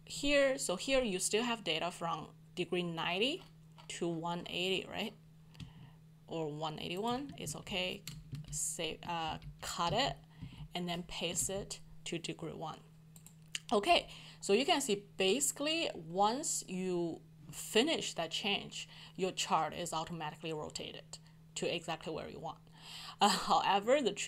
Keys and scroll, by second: 7.4 ctrl+shift+x, 8.3 ctrl+shift+Left, 9.2 ctrl+u, 11.4 f.